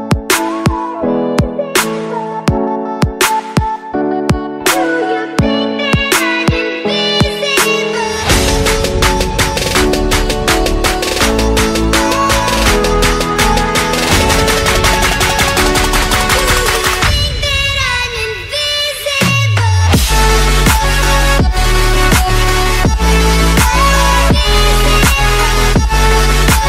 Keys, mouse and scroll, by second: 0.0-4.3 typing, 11.7-13.0 typing, 13.4 alt+Tab, 14.7 click, 16.3 click, 17.9 click, 18.8 click, 19.6 click, 20.6 click, 21.7 click, 22.7 click, 24.1 click, 25.0 middle click, 25.0 middle click, 25.2 middle click, 25.7 click, 26.1 middle click.